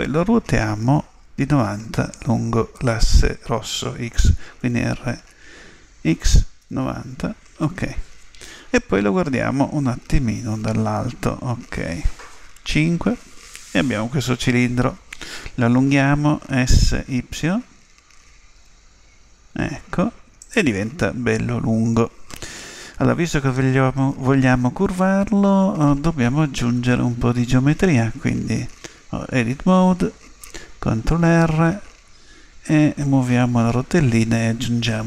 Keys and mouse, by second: 4.6 r, 10.5 KP_7, 12.7 KP_5, 18.1 s, 26.6 Tab, 31.3 ctrl+r.